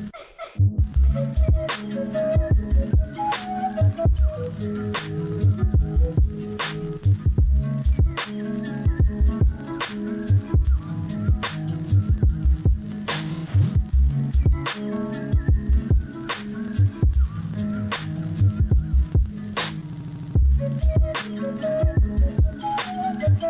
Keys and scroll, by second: 5.1 ctrl+z, 8.6 ctrl+z, 9.2 ctrl+z, 10.4 ctrl+z, 15.6 ctrl+z, 17.7 ctrl+z, 19.9 ctrl+z, 20.5 ctrl+z, 21.4 ctrl+z.